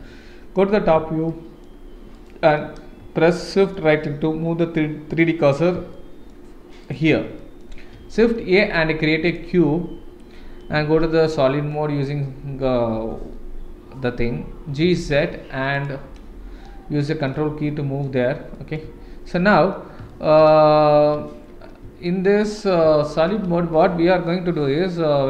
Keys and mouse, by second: 1.3-1.6 shift+middle drag, 2.2 shift+right click, 3.3-3.7 shift+middle drag, 6.0-6.3 shift+middle drag, 6.8 shift+right click, 7.4 shift+middle drag, 7.9 shift+a, 10.9 shift+z, 11.2-11.7 middle drag, 13.2 KP_1, 14.7 g, 16.1-16.6 middle drag, 17.0 middle drag, 17.7-18.1 shift+middle drag, 18.5 middle drag, 20.1 shift+middle drag, 20.4 shift+z, 21.1 z, 22.1 shift+middle drag, 23.1 shift+middle drag.